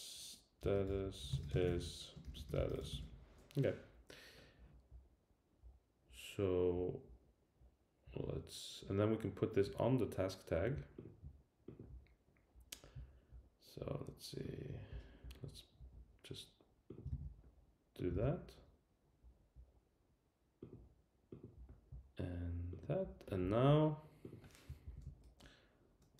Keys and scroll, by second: 17.1 super+c, 18.2 super+v, 24.8 super+Left.